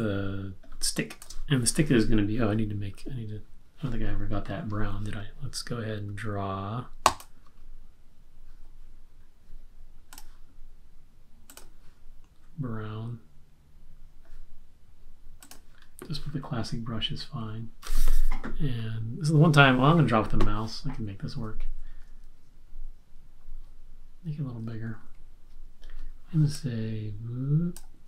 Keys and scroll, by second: 24.6 ], 24.7 ], 24.8 ], 25.0 ].